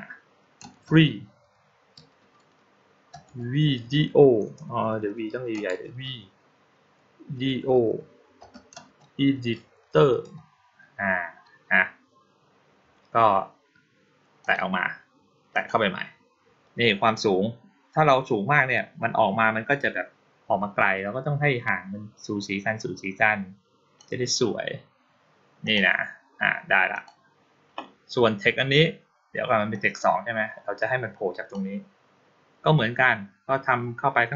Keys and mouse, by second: 14.3 click, 15.4 click, 17.0-23.8 drag, 25.5 click, 26.8 click, 29.6-31.4 drag.